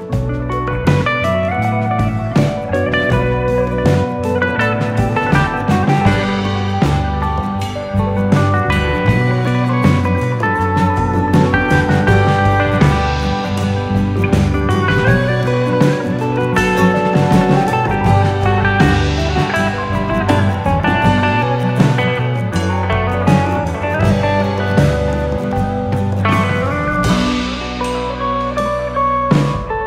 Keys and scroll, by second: 1.3-3.1 alt+], 3.3 alt+], 3.6 alt+], 7.5 alt+], 15.5 alt+[, 16.0-16.6 typing, 27.3 F9.